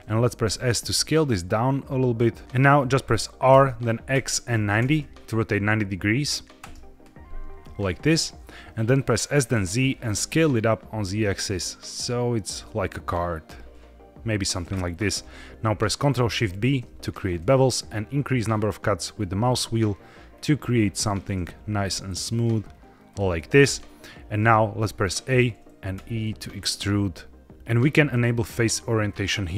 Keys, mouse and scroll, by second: 0.4-1.4 scroll up 1, 0.4 s, 2.4 middle click, 3.4 r, 4.0 x, 4.7 KP_9, 5.7 KP_0, 6.5 KP_Enter, 8.1 middle click, 9.1 s, 9.4 z, 14.2 click, 15.2-16.0 scroll up 1, 16.5 ctrl+shift+b, 18.0-19.1 scroll up 2, 19.1-19.5 scroll up 1, 20.3-21.3 scroll up 2, 23.0 shift+click, 23.7-25.2 middle drag, 25.2 a, 25.9 e, 27.4 click, 28.0-29.5 drag.